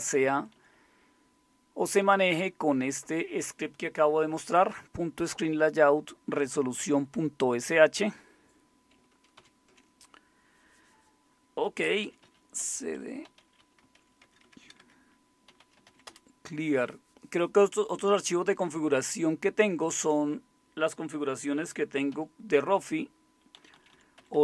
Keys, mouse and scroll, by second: 0.3 Right, 0.3 Left, 0.5 Left, 0.7-2.2 Left, 6.7 Right, 6.9 Right, 7.1-8.0 Right, 9.4 ctrl+x, 11.8-16.3 typing, 22.1 alt+super+d, 23.5 Down, 23.7 Down, 23.9 Down, 24.1 Up, 24.3 Up.